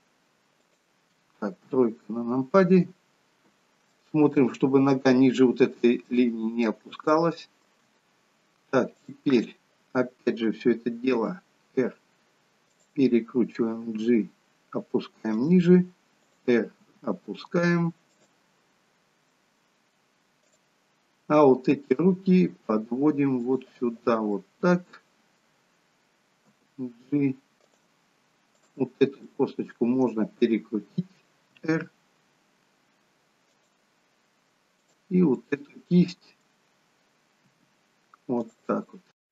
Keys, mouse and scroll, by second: 1.8 KP_3, 3.2-3.9 scroll up 1, 3.9 scroll up 1, 4.0 shift+middle click, 7.2 shift+middle click, 9.2 click, 11.4 r, 14.1 g, 16.4 click, 17.0 g, 19.4 middle click, 21.9 g, 24.5 middle click, 26.7 g, 29.0 click, 29.4 middle click, 31.7 r, 35.0 click, 35.6 middle click, 37.7 r.